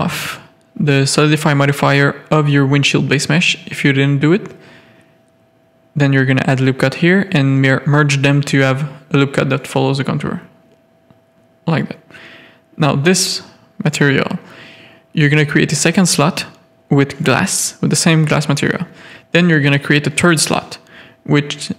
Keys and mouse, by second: 0.8 click, 1.0 g, 1.9 g, 2.9 click, 3.1 g, 4.0 middle click, 4.9 ctrl+r, 7.3 ctrl+r, 8.8 ctrl+r, 9.9 Tab, 10.3 alt+a, 10.6 Tab, 10.9 3, 12.4 z, 12.7 shift+middle click, 16.4-18.3 drag, 19.1 click, 19.7 click, 20.5-21.7 drag.